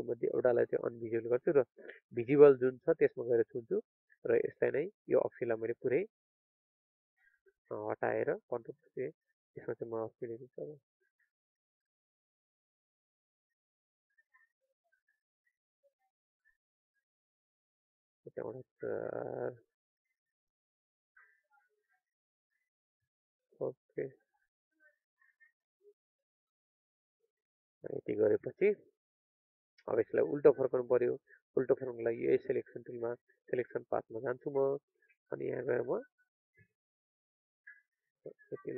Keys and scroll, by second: 6.9 ctrl+a, 16.5 alt+0, 16.7 alt+1, 17.0 alt+5.